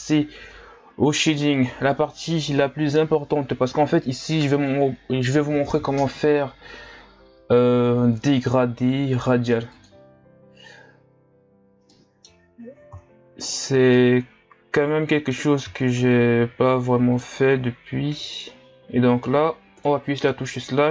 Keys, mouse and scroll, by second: 10.7 click, 12.0 middle click, 12.6-14.0 scroll up 7, 14.0-20.9 middle drag.